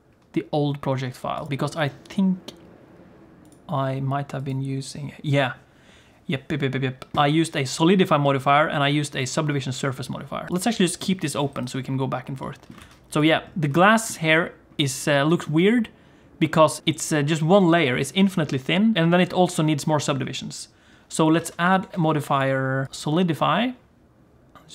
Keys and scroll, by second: 12.8 alt+a, 21.4 alt+a, 21.9 ctrl+s.